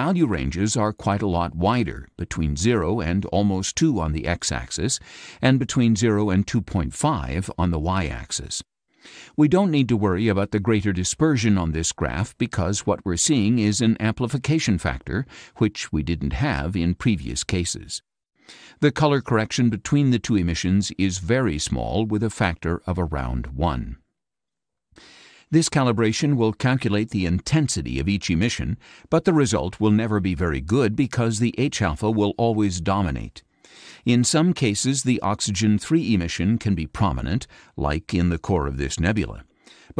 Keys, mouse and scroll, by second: 3.2 click, 3.9 click, 23.5-24.5 drag, 38.4 scroll down 2.